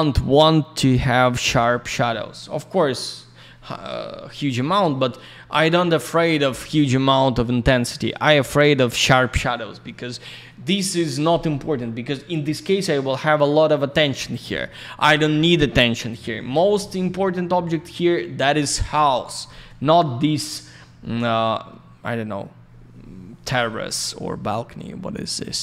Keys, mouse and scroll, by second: 1.0 click, 3.9 scroll down 1, 4.9-5.7 scroll up 1, 10.7 scroll down 1.